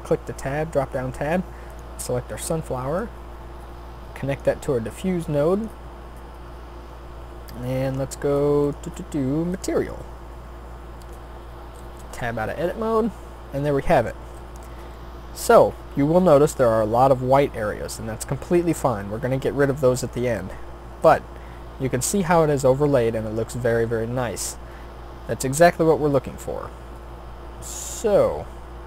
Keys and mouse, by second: 12.0 Tab, 21.2 middle click.